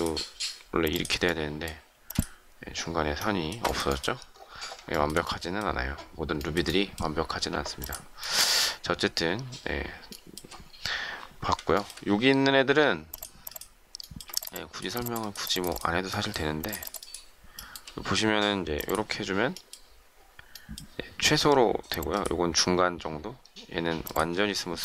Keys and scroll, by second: 1.9 space.